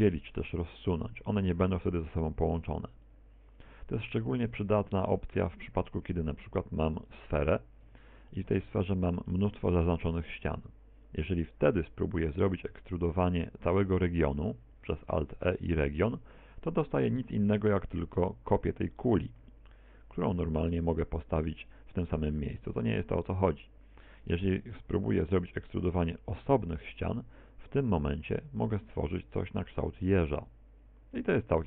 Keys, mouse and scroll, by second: 0.1 g, 0.7 click, 1.1 right click, 1.5 g, 2.1 click, 2.6 right click, 2.7 g, 3.2 click, 4.5 Tab, 5.0 x, 5.9 shift+a, 7.9 Tab, 8.3 shift+middle click, 8.8-9.3 scroll up 5, 9.3 shift+middle click, 14.9 alt+e, 19.9 s, 21.9 click, 22.4 x, 24.0 a, 25.2 alt+e.